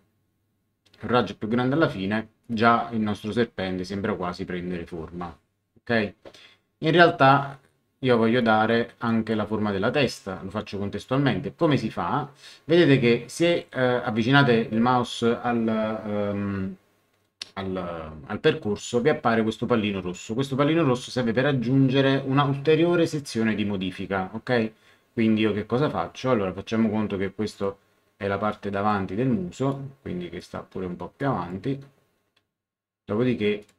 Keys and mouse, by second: 2.4 click, 7.3 click, 8.4 click, 26.6 click, 28.5 click, 29.7 click, 31.2 click, 33.6 click.